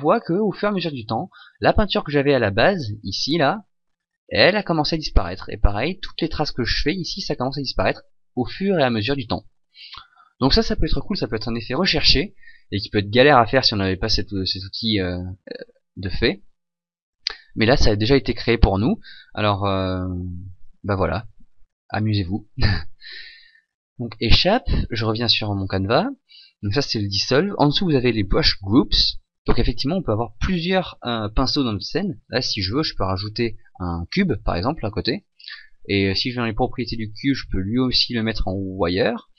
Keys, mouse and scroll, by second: 23.8 Escape, 25.0 right click, 32.7 shift+a, 35.2 click, 36.8 click, 37.8 click.